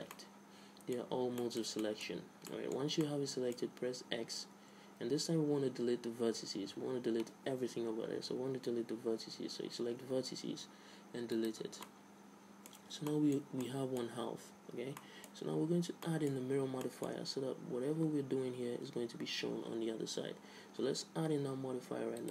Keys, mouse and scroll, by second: 0.3-1.8 drag, 0.3-2.3 middle drag, 2.3 z, 3.2-5.0 middle drag, 4.6 x, 12.0-18.8 middle drag, 13.0 Tab.